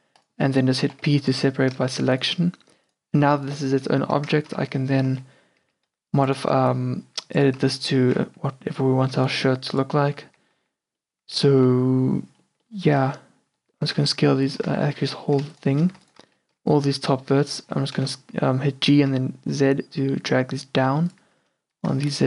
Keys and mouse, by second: 1.0 p, 2.0 Tab, 4.1 Tab, 4.7-6.6 typing, 7.7 z, 8.1 g, 10.3 z, 10.7 z, 11.7 z, 13.9 g, 14.8 ctrl+z, 15.6 ctrl+z, 18.0 g, 21.5 a.